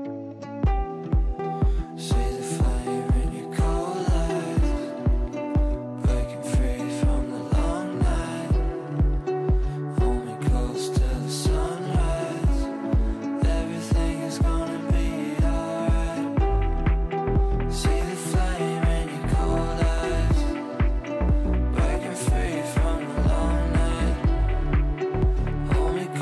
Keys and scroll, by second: 1.7 shift+F2.